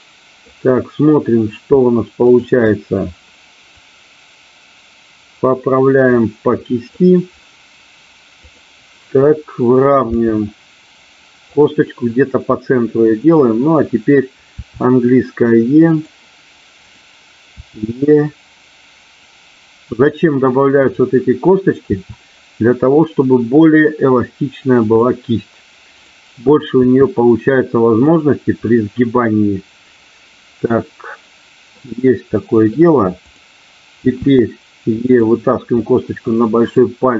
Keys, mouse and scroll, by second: 2.3 shift+click, 3.8-6.9 drag, 10.2 g, 11.4 click, 14.7 e, 15.9 click, 16.7 click, 17.4 e, 19.8 click, 20.8 click, 21.9 e, 24.7 click, 26.7 e, 27.9 click, 28.7-31.8 middle drag, 32.3 middle click, 33.2 click, 34.1 e, 35.1 click, 35.7-36.7 middle drag.